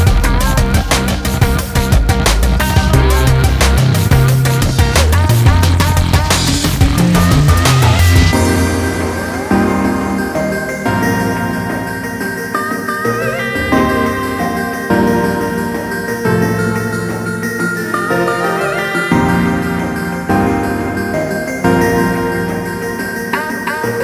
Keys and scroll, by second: 15.8 Down, 16.6 Down, 17.7 Down, 18.3 Down, 18.8 Down, 19.4 Down, 20.8 Down.